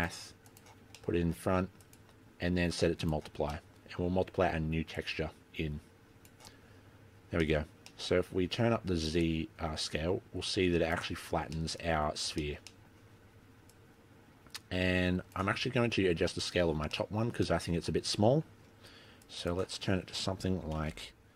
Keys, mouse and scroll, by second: 1.1 middle click, 1.9 click, 3.7 middle click, 5.1 click, 7.5 middle click, 8.1 middle click, 8.2-9.2 scroll up 2, 9.2 click, 9.2 scroll up 3, 11.7 middle click, 12.1-12.6 scroll down 3, 12.6 shift+middle click, 12.8 middle click, 13.8 click, 17.1 middle click, 17.6 middle click, 19.4 click.